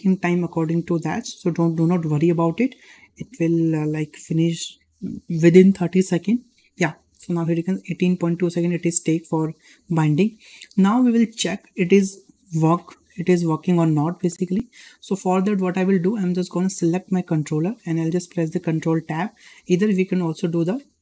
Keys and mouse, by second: 10.9-11.3 shift+middle drag, 14.9 shift+middle drag, 16.7 click, 20.5-21.0 drag.